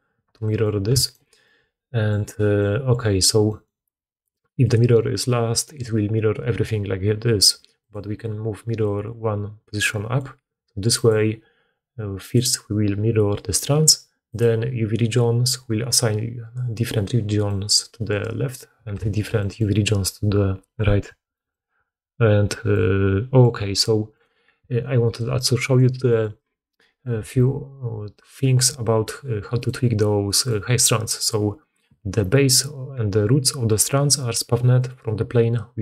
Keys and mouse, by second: 0.3 middle click, 1.0 middle click, 1.8-4.3 drag, 4.3 middle click, 4.5 click, 4.7 middle click, 5.6 click, 5.7-7.7 middle drag, 7.7 click, 7.9 middle click, 8.8-11.0 drag, 11.0-12.1 middle drag, 12.1 click, 12.3-14.2 middle drag, 14.2 click, 14.4-19.9 middle drag, 24.0 right click, 24.9 right click, 25.5 right click, 26.0 right click, 29.5 click, 34.6 click, 35.7 click.